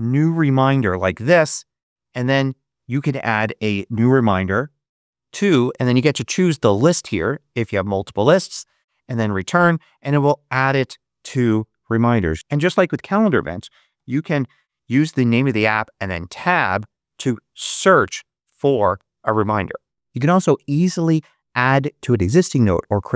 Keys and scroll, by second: 0.0-0.8 typing, 1.3 Return, 3.9-4.9 typing, 5.5 Tab, 8.3 Return, 12.3-14.6 typing, 15.9 Tab, 17.4 t.